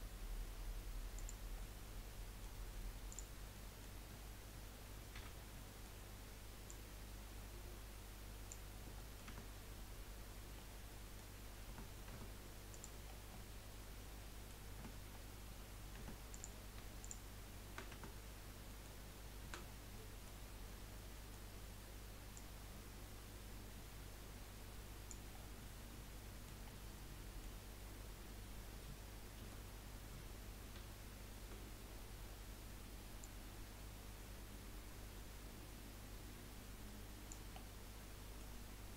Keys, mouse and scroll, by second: 1.7-3.1 middle drag, 3.1 click, 3.5-5.2 middle drag, 5.2 l, 5.5-6.7 middle drag, 6.7 click, 8.7 scroll down 3, 9.0 middle click, 9.3 Tab, 10.6-11.7 middle drag, 11.7 Tab, 12.1 Tab, 12.7 click, 13.1 scroll down 2, 13.3-14.7 middle drag, 14.7-16.0 scroll up 3, 16.0 Tab, 16.3 click, 17.0 shift+click, 17.9 Tab, 18.3 scroll up 3, 18.7 middle click, 19.4 a, 19.6-19.9 scroll down 3, 19.9-22.3 middle drag, 22.3 click, 25.3 scroll down 2, 25.6-29.4 middle drag, 29.4 KP_3, 30.8 z, 31.8-33.2 scroll up 8, 33.2 click, 37.5 scroll down 4, 37.8-38.9 middle drag.